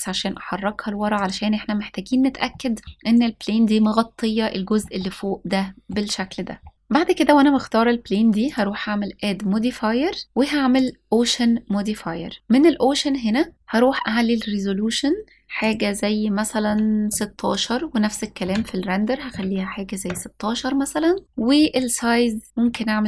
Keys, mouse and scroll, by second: 0.8 click, 2.1-2.8 middle drag, 4.6-5.6 middle drag, 5.6-5.9 scroll down 1, 6.7-7.5 scroll up 1, 8.1-10.5 drag, 11.6-12.3 scroll down 2, 12.4-13.5 scroll up 1, 15.2-17.2 drag, 17.7-19.6 drag, 21.2-21.6 scroll down 2, 22.3 scroll down 3, 22.5 s.